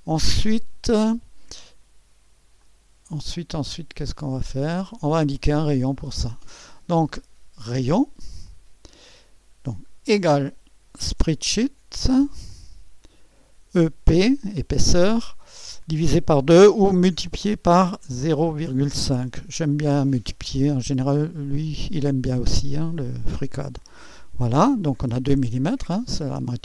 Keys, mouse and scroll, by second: 2.6-3.8 drag, 4.2-5.2 drag, 5.4 click, 5.9 click, 8.4 click, 10.0-11.6 typing, 12.5-13.5 drag, 13.7-14.1 typing, 14.9 click, 17.2 *, 18.2 0, 18.6 ., 19.2 KP_5, 21.1-22.2 drag, 23.6-24.7 drag.